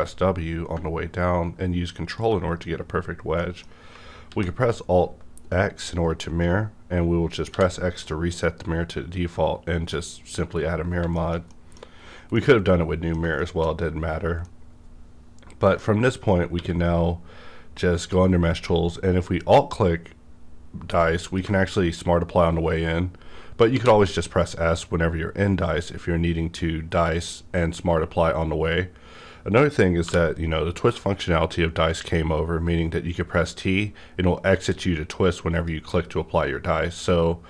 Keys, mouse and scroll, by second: 3.1 scroll down 1, 3.3 middle click, 4.3 alt+x, 7.5 alt+x, 9.9 click, 9.9 x, 10.7 scroll down 1, 11.1 shift+middle click, 11.6 scroll down 2, 11.7 middle click, 11.9-12.3 scroll up 2, 12.3-13.8 middle drag, 13.8 scroll down 1, 14.4-21.3 middle drag, 16.5 q, 21.3 alt+click, 23.0-23.7 scroll up 1, 23.7 s, 25.0-25.8 scroll up 1, 26.1-29.9 scroll up 1, 30.0 t, 33.0-34.7 scroll up 1, 35.5 click, 35.5 scroll up 1.